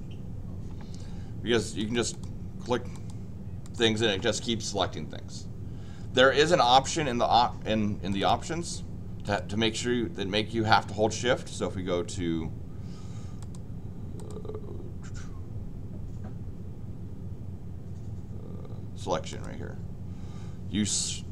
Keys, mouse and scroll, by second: 1.7 click, 2.1 click, 2.9 click, 3.6 click, 6.3 Escape, 6.6 Escape, 8.1 click, 9.2 click, 13.4 click, 14.1 click, 19.3 click.